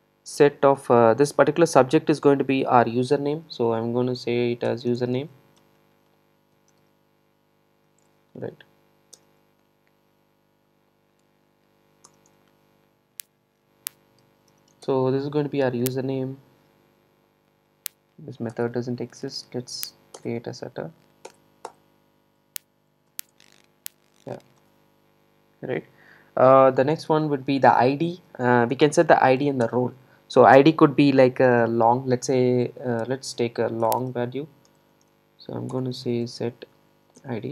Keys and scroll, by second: 18.6 alt+Return, 23.1 super+e, 35.8 Return.